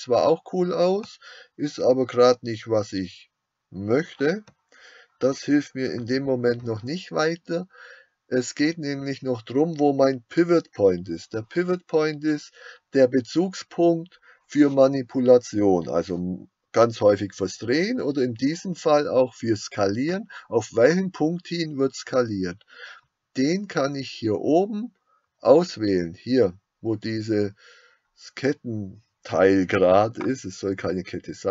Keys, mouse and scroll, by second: 6.1 Escape.